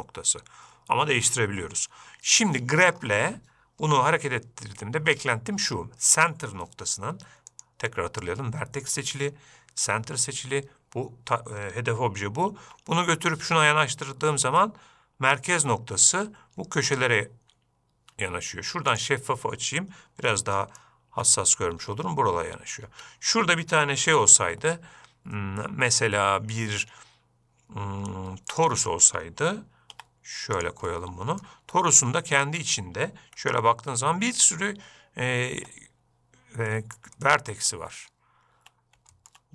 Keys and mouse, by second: 7.9-10.8 drag, 13.0 g, 19.4-20.7 drag, 20.7-21.2 middle drag, 21.5 g, 24.5 shift+a, 30.3 g, 31.3-31.8 middle drag, 33.8 Tab, 36.0 Tab, 37.1 middle click, 37.6-37.9 shift+middle drag.